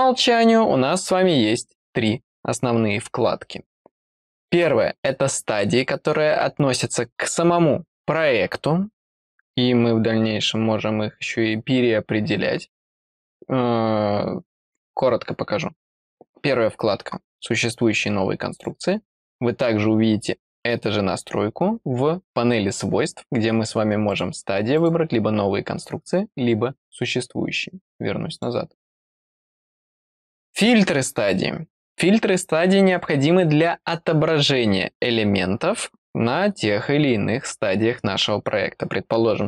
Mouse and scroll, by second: 18.5 click, 19.3-20.5 scroll down 1, 24.1 click, 24.7 click, 28.3 click, 29.0 click, 30.3 click.